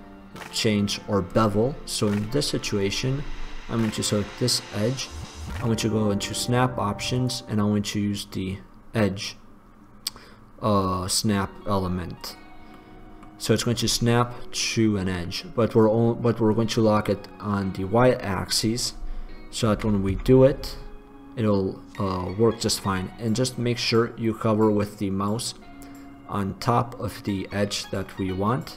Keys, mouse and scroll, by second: 3.0-4.9 drag, 6.5-12.9 drag, 13.0-14.7 drag, 19.9 g.